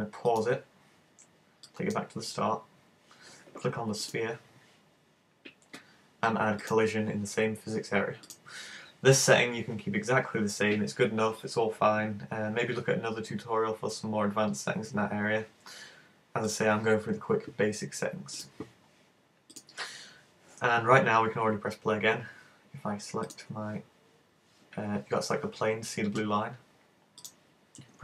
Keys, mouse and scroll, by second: 0.3 click, 1.7 click, 4.1 right click, 6.6 click, 8.3 click, 19.6 click, 23.3 right click, 27.2 click.